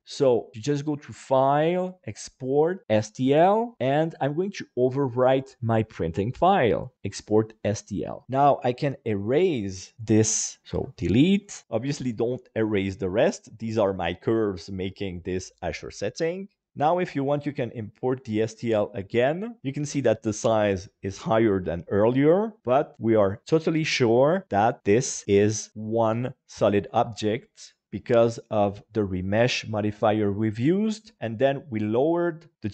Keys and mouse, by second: 0.9-3.0 drag, 10.7 Delete, 11.8 middle click, 16.7-18.6 drag, 26.0 KP_Divide, 27.3-32.7 middle drag.